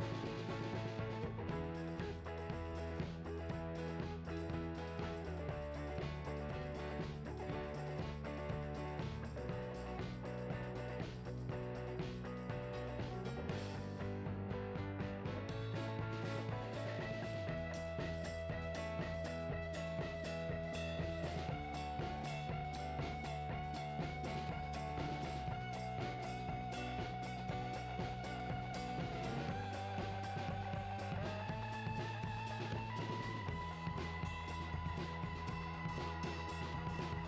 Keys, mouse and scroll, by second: 0.0-4.5 typing, 0.3 Tab, 0.4 alt+a, 0.5 scroll down 2, 0.8 click, 1.1 right click, 1.2 click, 2.2 click, 2.6 click, 2.8 ctrl+a, 2.9 scroll up 2, 3.6-5.1 drag, 4.2 scroll down 2, 5.7-6.9 drag, 6.9 scroll down 2, 7.1 `, 7.4 g, 7.8 click, 8.0 `, 11.0 click, 11.8 shift+s, 11.9 alt+a, 12.8-14.4 typing, 13.8 click, 14.0 scroll down 1, 15.2 click, 17.0 `, 17.4 Tab, 17.6 alt+a, 17.7 ctrl+r, 17.9 right click, 18.6 ctrl+b, 19.8 i, 21.8 click, 22.0-27.2 typing, 22.7 click, 23.0 click, 23.1-23.6 scroll down 2, 23.6 scroll up 1, 24.0 click, 24.3 ctrl+click, 24.4 scroll down 1, 25.4 click, 25.6 scroll up 1, 26.1 click, 26.4 ctrl+click, 27.0 ctrl+z, 27.8 Tab, 28.2 scroll up 2, 28.5 Tab, 28.6 ctrl+r, 29.2 Tab, 29.4 shift+r, 29.5 Tab, 29.9 x, 30.2 scroll down 2, 30.7 click, 31.0 ctrl+click, 31.3 x, 31.4 ctrl+r, 32.5 click, 32.6 scroll up 1, 33.0-36.6 typing, 33.1 click, 33.6 click, 33.8 alt+click, 34.0 ctrl+x, 34.0 scroll down 1, 35.3 click, 35.9 click, 36.5 Tab, 37.2 alt+h.